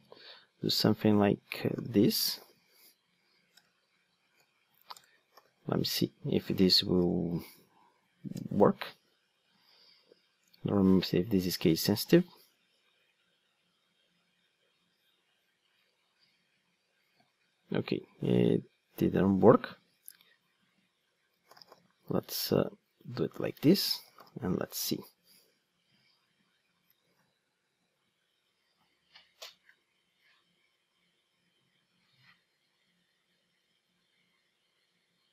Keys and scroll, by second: 0.0 super+d.